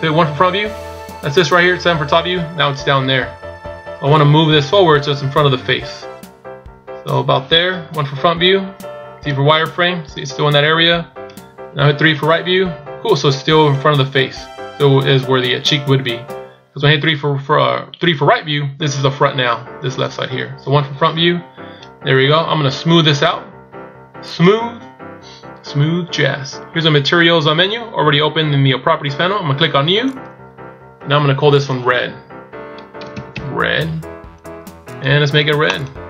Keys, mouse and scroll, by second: 0.1 KP_1, 2.0 KP_7, 4.2 click, 8.0 KP_1, 9.3 z, 12.1 KP_3, 20.8 KP_1, 24.3 click, 30.1 click, 31.7 click, 35.7 click.